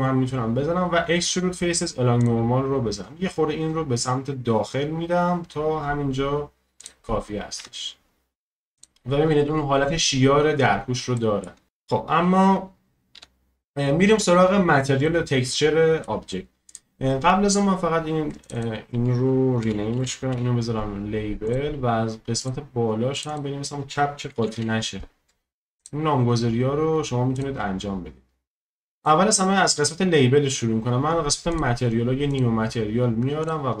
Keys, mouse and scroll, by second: 7.6 Tab, 8.0-8.7 scroll down 1, 8.7 click, 9.2-10.8 scroll up 2, 10.8-11.1 scroll down 1, 11.1-11.7 shift+middle drag, 11.7-13.1 scroll down 1, 13.1 KP_1, 14.1-15.0 scroll up 2, 15.0-16.7 shift+middle drag, 16.7-21.5 drag, 22.4-26.3 drag, 27.3-33.8 drag.